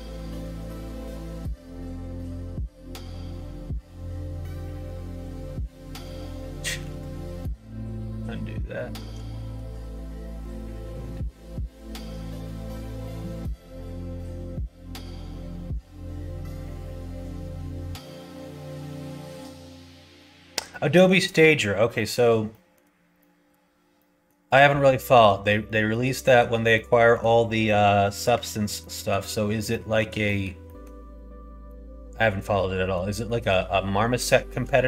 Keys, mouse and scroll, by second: 6.2 middle click, 8.0 ctrl+z, 8.0 middle click, 8.7 middle click, 11.0 ctrl+z, 11.0 middle click, 12.1 click, 14.5 Tab, 16.8-19.3 middle drag, 20.7 middle click, 21.3 middle click, 21.9 middle click, 22.5 shift+middle click, 23.2 middle click, 23.9 middle click, 24.7 middle click, 25.6 middle click, 26.2 shift+middle click, 26.7 middle click, 28.8 middle click, 29.7 shift+middle click, 30.2 middle click, 30.6 middle click, 31.7-32.9 middle drag, 33.2 middle click, 34.2 middle click.